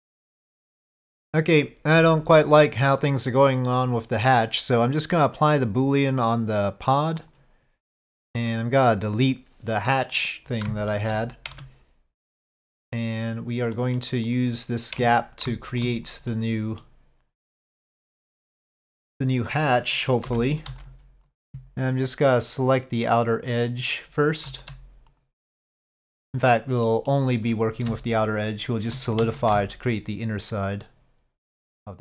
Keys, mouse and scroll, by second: 5.5-7.3 drag, 8.1 click, 8.5 click, 9.7-10.1 middle drag, 10.6 shift+middle drag, 11.5 Tab, 12.2-12.5 middle drag, 13.7 middle drag, 15.0 Tab, 15.5 shift+middle click, 16.3 middle click, 17.4 middle click, 20.2 3, 20.8 alt+click, 21.1 ctrl+z, 22.6 shift+click, 23.9 shift+click, 25.9 middle click, 26.8 middle click, 28.3 shift+click, 29.2 ctrl+z, 30.6 shift+click.